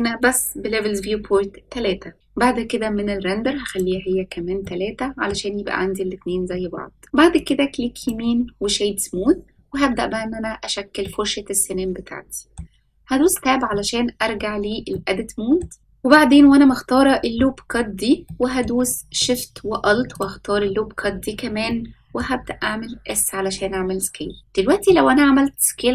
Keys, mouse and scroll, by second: 3.6 click, 4.6-5.2 middle drag, 5.7-7.3 scroll up 1, 7.3-10.3 right drag, 11.0-12.5 middle drag, 13.1 Tab, 14.8 middle click, 18.2 middle click, 18.7-19.1 scroll up 1, 20.1 alt+shift+click, 21.6 middle click, 22.9 s.